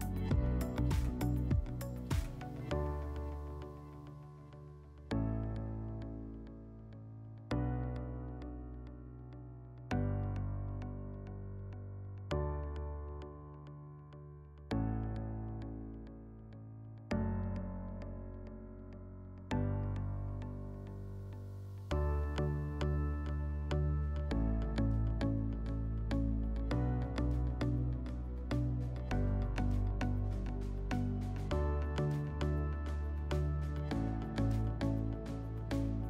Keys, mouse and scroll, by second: 2.1 click, 7.1 click, 8.9 click, 9.0 click, 10.3-11.1 typing, 11.4 Return, 15.8-17.4 drag, 17.9-18.3 drag, 20.8 click.